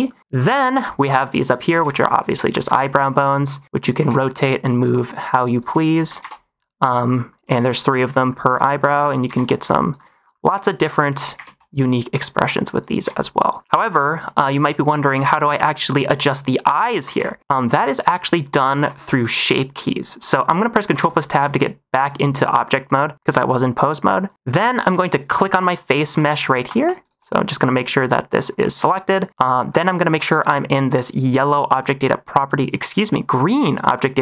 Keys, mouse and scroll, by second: 0.7 click, 1.6-4.7 typing, 3.5 click, 5.5 click, 5.8 shift+click, 6.2 r, 7.1 -, 7.4 r, 8.2 -, 8.4 click, 8.9 click, 9.2-13.5 typing, 10.5 click, 12.0 click, 13.9 shift+middle click, 14.5 middle click, 15.0 ctrl+Tab, 15.2 -, 16.6 middle click, 17.0 ctrl+s, 18.7 ctrl+Tab, 19.3 middle click, 20.8 ctrl+Tab, 25.2 click, 26.1 click, 26.6 click, 26.8 click, 26.9 click, 27.1 click, 28.5 middle click.